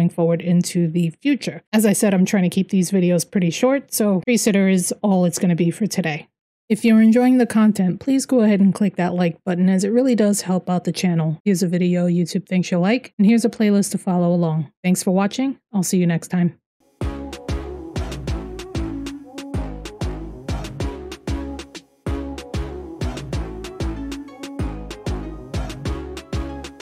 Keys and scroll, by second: 6.6-8.8 typing, 9.9-17.0 typing.